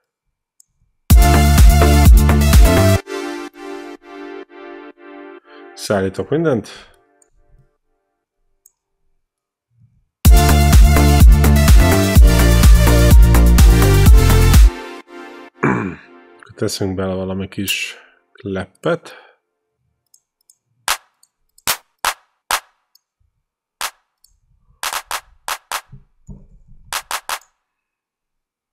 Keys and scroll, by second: 0.9 space, 2.7 space, 10.1 space, 14.3 space, 17.5 q, 23.4 q, 26.5 ctrl+l, 26.8 q.